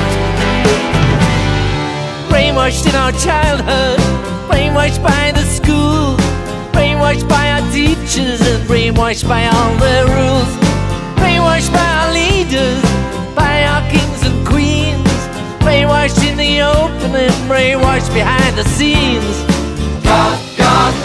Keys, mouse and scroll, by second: 0.4 click, 3.9 click, 7.0-8.2 drag, 9.7 click, 10.2 click, 13.6 click, 18.4-19.1 typing, 20.3 click.